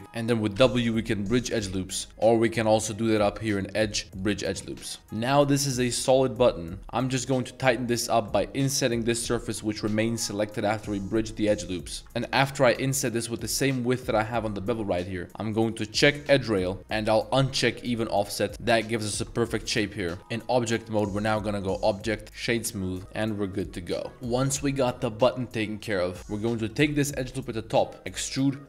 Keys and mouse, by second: 0.0 ctrl+z, 0.5 w, 2.1 z, 2.7-3.6 drag, 3.9-4.5 drag, 4.7-5.7 middle drag, 5.0 Tab, 6.1-6.4 middle drag, 6.8 z, 7.4-8.0 middle drag, 8.9 i, 12.0 ctrl+z, 12.5 i, 16.2-17.8 drag, 18.3 middle click, 19.0 Tab, 19.0-19.5 middle drag, 19.8 middle drag, 20.0 a, 20.1 a, 20.2 middle click, 20.5 Tab, 21.3 Tab, 21.9-22.4 drag, 22.7 Tab, 22.9-24.0 middle drag, 24.1 ctrl+s, 25.4 shift+middle drag, 25.8 click, 27.4 middle click, 28.0 e.